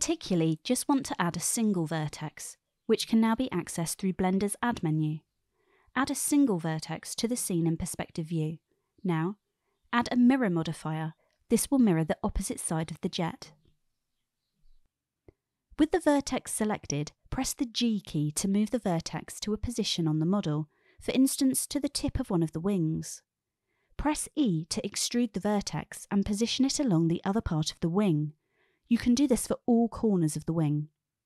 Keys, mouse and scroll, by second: 0.4 n, 1.5 click, 2.6 n, 4.4 shift+a, 9.8 click, 10.3-11.6 drag, 12.9 g, 14.1 ctrl+z, 16.9 g, 19.6 click, 21.1 shift+middle click, 23.5 g, 23.6 e, 25.4 click, 26.5-27.1 shift+middle drag, 28.1 e.